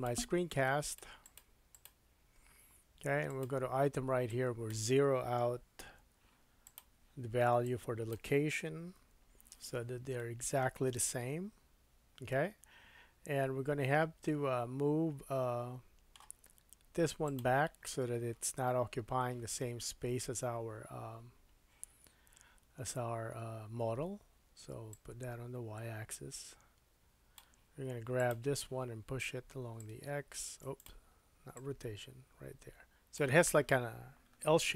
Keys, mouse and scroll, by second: 0.0 middle click, 1.8 click, 1.8-3.3 middle drag, 3.3 click, 3.4 middle click, 4.3-6.7 drag, 6.7 middle click, 7.6-17.4 drag, 10.2 middle click, 17.4-24.9 middle drag, 24.9-28.3 drag, 28.3-29.8 middle drag, 29.8-30.8 drag, 30.8 middle click, 31.5-34.7 drag.